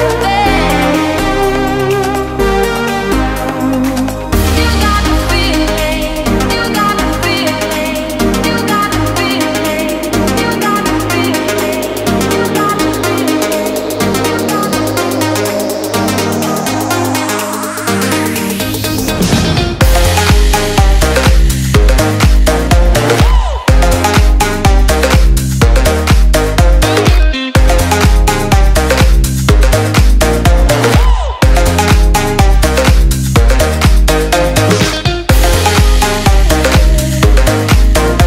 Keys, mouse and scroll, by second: 1.1 click, 1.4 scroll down 1, 1.6 scroll up 1, 2.1-2.7 scroll down 1, 2.7 scroll up 1, 3.1-3.4 scroll down 1, 3.4-3.9 click, 4.6 Return, 4.9 click, 5.1 Delete, 5.3 right click, 5.9 click, 6.8 alt+scroll down 1, 7.3 click, 13.6 Return, 14.4 click, 15.9 click, 16.7-17.7 click, 17.8 Return, 18.3 click, 21.4 click, 21.7 Return, 21.9 click, 23.0 alt+scroll down 1, 23.4 alt+scroll up 1, 24.1 click, 27.5 click, 32.5 ctrl+click, 33.3 ctrl+s, 34.9 click.